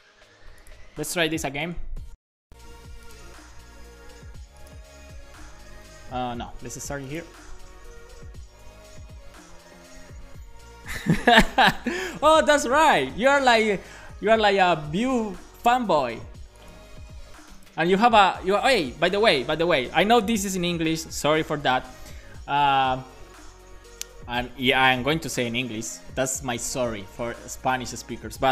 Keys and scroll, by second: 1.4 alt+shift+f, 8.3 Return.